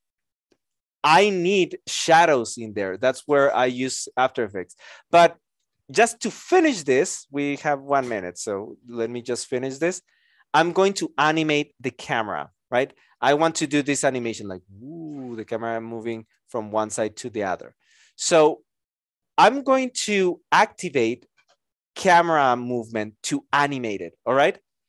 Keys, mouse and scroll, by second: 16.3 alt+click.